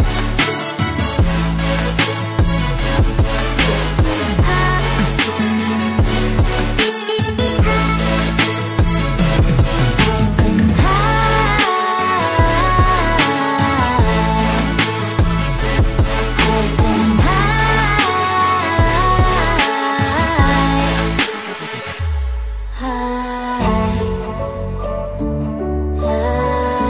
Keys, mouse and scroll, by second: 3.7 double click, 5.3 alt+scroll down 1, 5.4 alt+scroll up 1, 5.5 alt+scroll down 1, 6.4-7.4 typing, 8.1 ctrl+t, 8.3 shift+click, 11.0 double click, 12.4 alt+scroll up 1, 13.4 Right, 13.5 Right, 13.5 Right, 13.6 Right, 13.7-14.2 Down, 14.4 Return, 14.9 alt+scroll down 1, 15.2 alt+scroll up 1, 15.3 alt+scroll down 1, 16.8-17.1 scroll down 1, 18.0 scroll down 1, 23.0 ctrl+j, 25.1 right click, 25.8 double click, 25.9 right click.